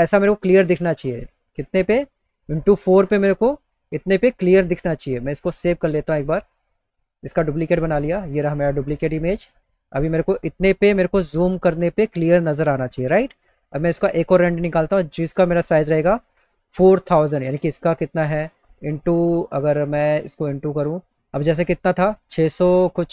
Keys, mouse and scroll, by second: 0.5 click, 6.4 click, 8.1 click, 13.9 click, 15.1 click.